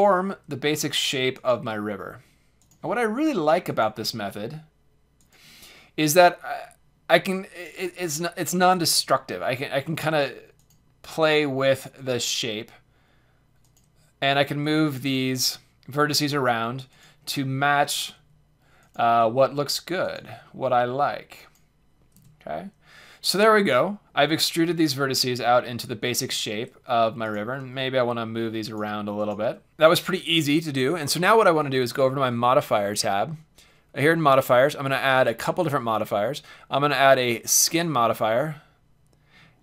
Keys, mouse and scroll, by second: 0.4-7.2 drag, 0.4 e, 1.7 e, 2.9 e, 3.9 e, 8.8-10.3 drag, 9.3 e, 11.0 e, 12.2 e, 13.8 e, 17.1 e, 17.1-23.5 drag, 18.1 e, 19.1 e, 20.2 e, 22.1 Tab, 26.1 Tab, 27.2-29.3 drag, 27.6 g, 29.4 g, 29.7 Tab, 29.7 g, 32.7-34.7 drag, 35.4-37.3 drag.